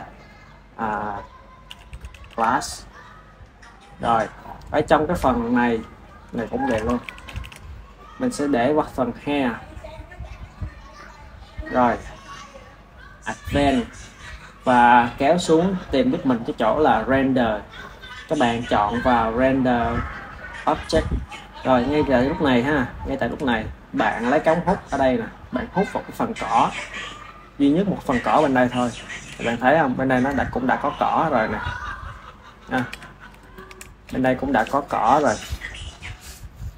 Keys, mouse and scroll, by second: 2.2 shift+s, 4.6-5.9 shift+middle drag, 5.9-7.3 drag, 7.3 shift+s, 10.7 click, 13.5 click, 14.4-17.0 middle drag, 17.0 click, 17.9-19.7 middle drag, 19.7-21.4 drag, 21.4-25.4 middle drag, 25.4-28.4 drag, 28.6 shift+middle click, 29.4 click, 30.3-32.8 ctrl+middle drag, 32.8 KP_1, 33.3-34.4 ctrl+middle drag, 34.4 s.